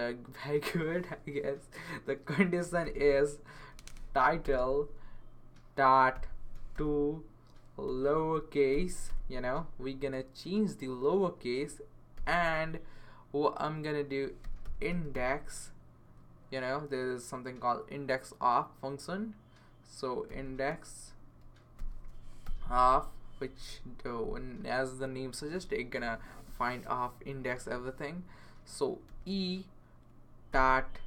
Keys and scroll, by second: 2.4-3.5 typing, 4.2 Down, 4.4 Return, 5.9-8.4 typing, 9.1 Return, 14.2-15.6 typing, 20.3 x, 21.8 shift+o, 22.4 f, 29.1 e, 30.5 ..